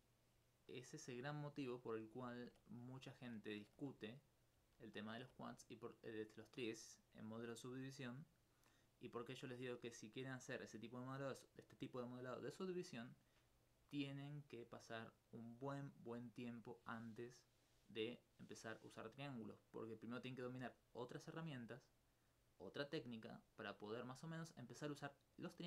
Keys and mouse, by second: 0.6 middle click, 4.9 alt+click, 18.6-19.7 middle drag.